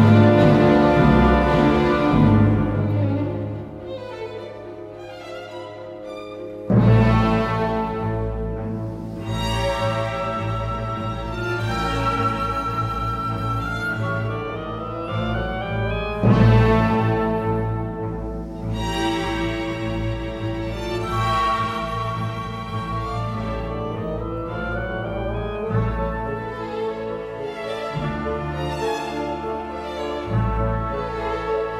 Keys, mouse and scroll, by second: 0.3 e, 1.0 w, 18.0 ctrl+0, 19.5 ctrl+d, 20.4 a.